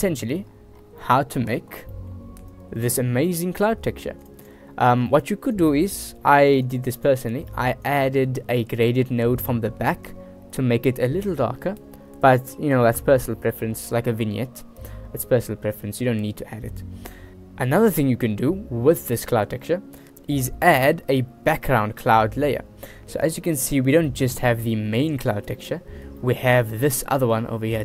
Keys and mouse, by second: 1.2 click, 2.1 click, 2.8-3.1 drag, 3.5 g, 5.3 click, 5.8-6.2 drag, 6.6 g, 7.2 click, 7.7 click, 8.1-9.3 drag, 21.1 click, 21.4 middle drag, 22.0 shift+middle drag, 22.5-22.9 middle drag, 23.6 shift+middle drag, 24.3 shift+drag, 25.0 shift+click, 25.8 shift+drag, 26.4 shift+click, 27.1 shift+click, 27.3 shift+middle click.